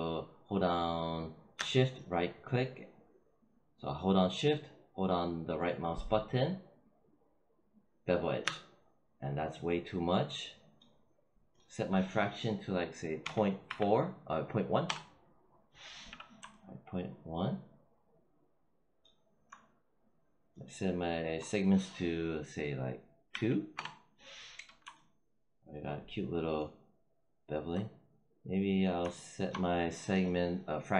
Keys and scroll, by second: 13.1 ., 13.5 1, 14.7 Return, 23.2 2, 23.6 Return.